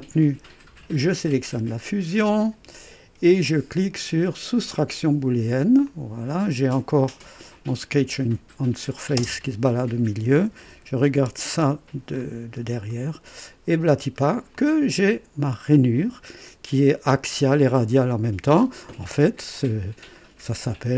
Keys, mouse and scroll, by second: 1.3 ctrl+click, 4.6 click, 5.9-7.6 drag, 8.6 click, 9.2 space, 10.6 KP_1, 11.5 KP_4, 12.1-12.8 scroll up 3, 12.9 right click, 13.7-14.4 scroll down 2, 14.5-16.3 drag, 17.0 click, 17.7 click, 19.6-20.9 drag.